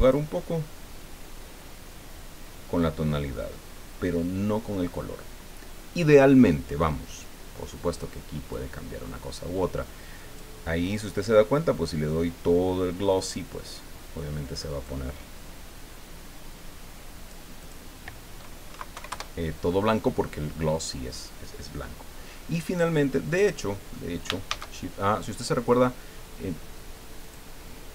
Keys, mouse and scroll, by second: 0.0 click, 0.9 scroll down 1, 1.4 scroll down 1, 2.2 scroll down 1, 3.3 scroll up 1, 8.5-10.6 drag, 14.8-17.5 drag, 17.6 click, 18.7 KP_Decimal, 18.9 KP_5, 19.1 KP_Enter, 21.8 scroll down 2, 23.3 middle click, 24.5 shift+a, 27.2 click.